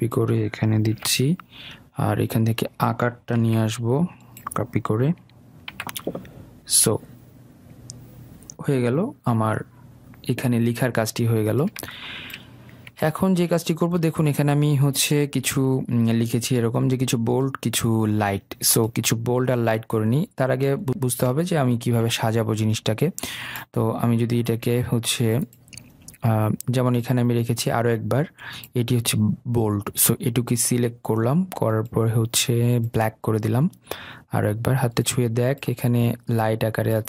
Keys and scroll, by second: 1.3 ctrl+v, 3.9 ctrl+c, 6.1 ctrl+v.